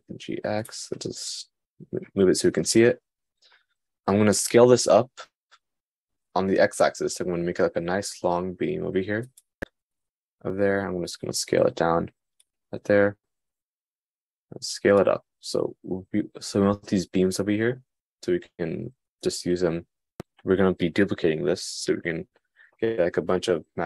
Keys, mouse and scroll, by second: 0.4 g, 6.8 s, 11.3 s, 13.7 s.